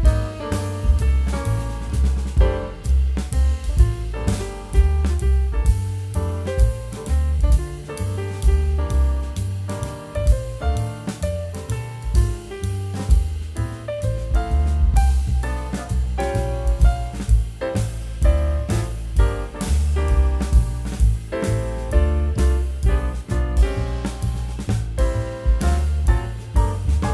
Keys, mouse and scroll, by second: 0.5 middle click, 0.7 scroll up 1, 0.8 middle click, 1.7 scroll up 1, 1.9 scroll down 1, 2.2 middle click, 2.8-3.5 scroll up 2, 3.0 middle click, 4.1 shift+click, 5.3 shift+click, 6.7 w, 8.3 middle click, 8.4 scroll up 1, 8.6 scroll down 1, 8.7 middle click, 9.6 shift+click, 11.2 shift+click, 12.7 shift+click, 15.0 middle click, 17.8 middle click, 19.1 middle click, 19.2 scroll down 1, 20.8 scroll down 1, 20.9 scroll up 1, 21.0 middle click, 21.4-22.0 alt+scroll down 1, 22.1 middle click, 22.3-22.8 scroll up 2, 22.5 middle click, 22.8-23.2 scroll down 2, 23.0 middle click, 23.4 alt+scroll up 1, 23.4 middle click, 23.5 scroll down 1, 23.6 scroll up 1, 24.7 middle click, 26.5 scroll down 1, 26.7 alt+middle click.